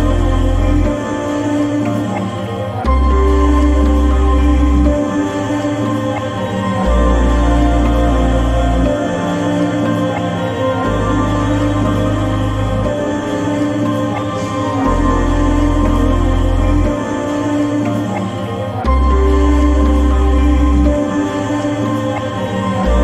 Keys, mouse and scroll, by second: 0.7 typing, 4.4 right click, 4.4 typing, 5.5 click, 7.2-13.1 drag, 7.2 typing, 17.8 click, 17.8-22.7 drag.